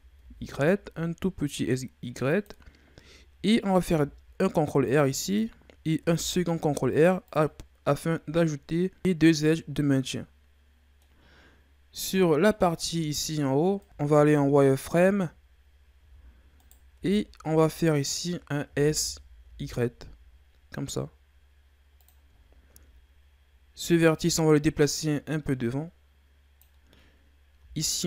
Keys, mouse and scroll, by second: 3.9 ctrl+r, 6.0 ctrl+r, 12.6-13.1 scroll up 2, 13.1-13.8 scroll down 2, 13.8 ctrl+z, 14.6-16.0 scroll up 1, 16.0 z, 16.5 right click, 16.9 b, 18.6 s, 22.4-23.9 scroll down 3, 23.9 right click, 24.8-27.8 drag, 27.8 alt+right click.